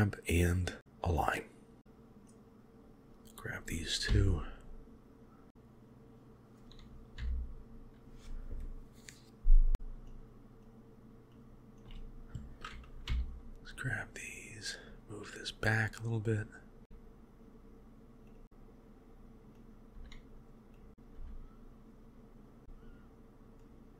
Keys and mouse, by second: 1.8 Tab, 2.1-3.1 drag, 4.1 g, 7.2 g, 10.1 shift+click, 11.5 shift+click, 13.1 g, 16.8 g, 19.7 click, 20.0 g, 20.9 g, 21.0 click, 21.2 g, 22.6 g.